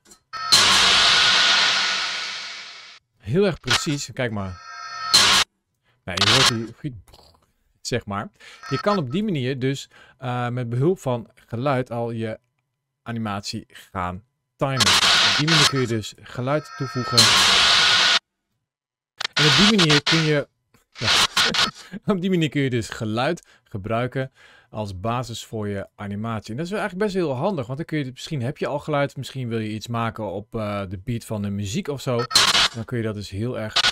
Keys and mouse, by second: 0.3 space, 2.9 space, 3.5 click, 4.2 space, 5.3 space, 6.1 click, 8.5 click, 14.7-15.9 drag, 16.4 space, 18.1 space, 19.2-21.7 drag, 25.7-27.2 drag, 28.4 middle click, 32.2 click, 33.7 click.